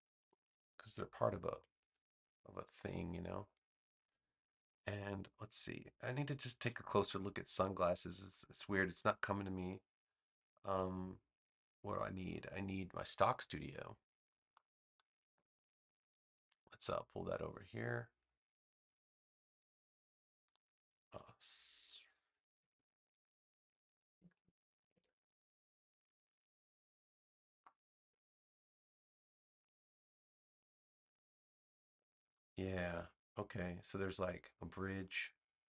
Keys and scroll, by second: 0.1 4, 0.4 Return, 22.1-24.8 typing.